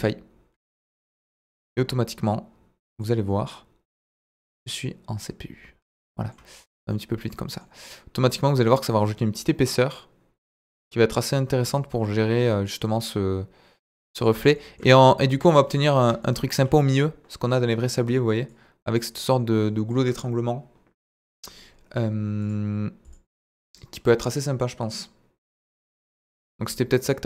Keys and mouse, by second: 3.0 click, 4.3-5.0 drag, 6.9-7.6 middle drag, 7.8-8.3 middle drag, 10.7 click, 15.3 KP_1, 16.2-16.6 shift+middle drag, 22.4 click, 23.0 click, 24.3 middle click.